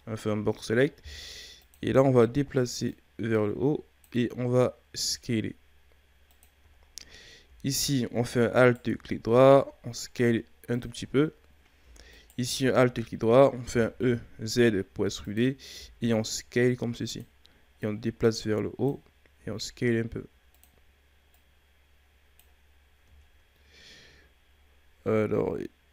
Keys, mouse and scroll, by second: 0.0-0.8 scroll down 2, 0.8-1.6 shift+scroll up 1, 1.6 click, 2.1-2.9 scroll up 3, 2.9-4.9 drag, 4.9 s, 6.8-8.6 shift+scroll down 5, 8.6 alt+right click, 9.6 s, 11.0-12.1 shift+scroll down 3, 12.1 alt+right click, 13.1 shift+scroll down 4, 13.6 e, 15.7 s, 17.8-19.3 drag, 19.3 s, 21.3-22.6 drag, 22.6-23.2 scroll down 2, 23.2-25.9 scroll up 2.